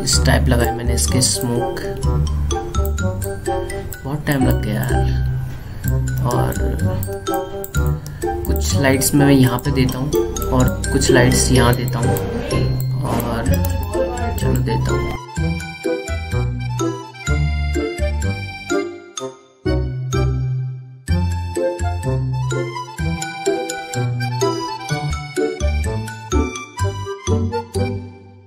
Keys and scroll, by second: 2.3 space, 7.2 space, 9.5 space, 22.9 ctrl+z.